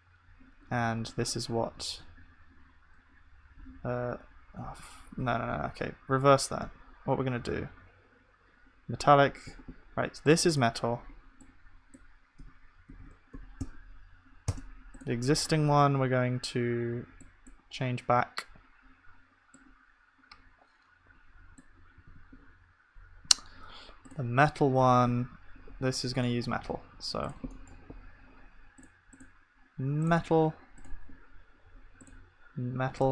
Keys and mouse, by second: 2.1 Tab, 2.8 Tab, 5.7 ctrl+z, 6.1 ctrl+z, 7.4 ctrl+z, 12.1-14.4 drag, 14.9-22.0 drag, 19.9-22.0 middle drag, 19.9-22.0 right drag, 22.0 ctrl+s, 24.9-30.1 middle drag, 27.6-33.1 drag, 27.6-33.1 right drag.